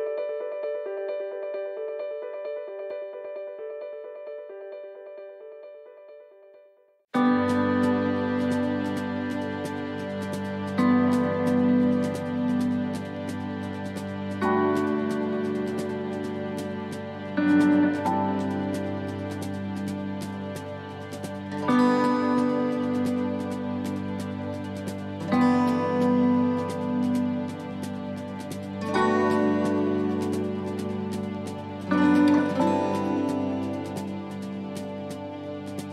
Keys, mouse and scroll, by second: 0.0 right click, 0.6 middle click, 2.0 click, 2.4 right click, 3.5 e, 6.0 click, 7.0 alt+shift+right click, 7.5 middle click, 7.9 scroll down 2, 8.5 middle click, 8.5-9.2 scroll down 6, 9.3 shift+middle click, 17.0 shift+middle click, 17.4-18.0 scroll up 4, 17.8 middle click, 18.4 shift+middle click, 18.8 scroll up 1, 19.6 right click, 20.5 right click, 21.2 right click, 21.4 alt+shift+right click, 21.7 alt+shift+right click, 22.4 e, 26.4 click, 26.4 s, 28.2 ctrl+r, 29.8 click, 31.2 middle click, 31.6-31.9 scroll down 2, 32.0 shift+middle click, 34.2 shift+middle click, 35.1 shift+middle click, 35.2-35.9 scroll up 3, 35.6 middle click.